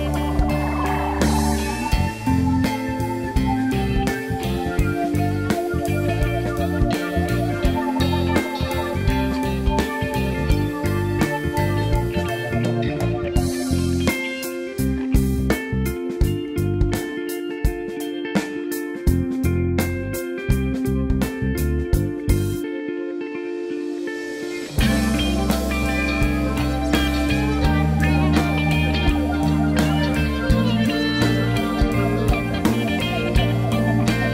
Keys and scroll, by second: 9.2 ctrl+c, 9.4 ctrl+f, 23.3 Delete, 27.8 space, 33.2 ctrl+c, 33.7 ctrl+f.